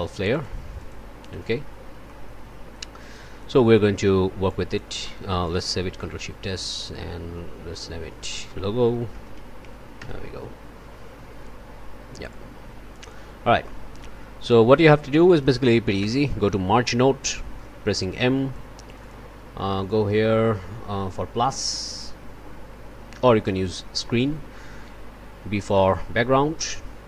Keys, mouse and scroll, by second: 0.7 click, 1.2 click, 2.0 click, 3.0 click, 3.7 click, 4.4 click, 5.4 ctrl+click, 5.9 ctrl+shift+s, 8.2 click, 8.7-9.8 typing, 12.3-13.3 drag, 13.6 click, 16.0 m, 17.5-18.7 drag, 18.8 click, 19.8-22.2 drag, 23.9-25.9 drag, 26.5 click.